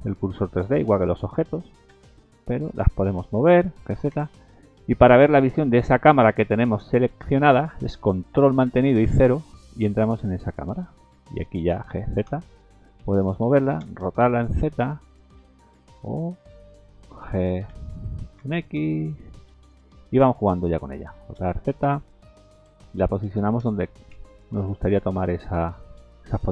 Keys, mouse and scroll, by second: 0.7 scroll up 1, 1.9 g, 3.6 g, 5.0 middle click, 5.9 shift+middle click, 8.9 ctrl+KP_0, 10.4-10.9 scroll down 1, 11.7 g, 13.9 r, 17.7 g, 21.3 r, 23.6 g, 25.7 scroll up 3, 26.4 scroll up 2.